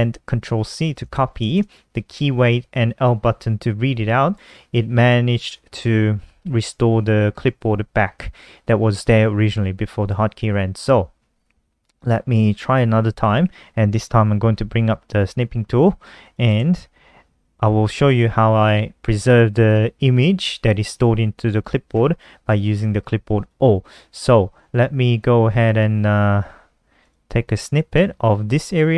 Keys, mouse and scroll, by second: 0.8 shift+Home, 1.1 BackSpace, 13.9-14.9 typing, 15.7 click, 26.3-27.0 typing, 27.7 click.